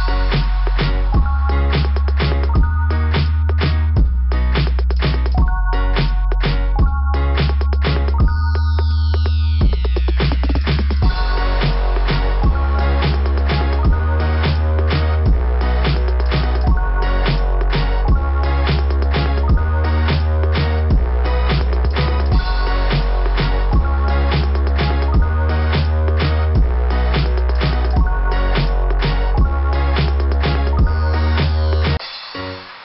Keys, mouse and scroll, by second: 0.0 click, 2.3 click, 2.5 click, 4.4-4.7 scroll down 1, 6.7-7.7 scroll down 2, 7.9 scroll down 1, 8.9 scroll down 1, 9.8 click, 11.7 click, 12.9 click, 14.3 click, 14.5 click, 16.2 click, 16.3 click, 19.0 click, 20.8 click, 21.2 click, 22.8 click, 22.8 click, 31.4 click, 31.5 click.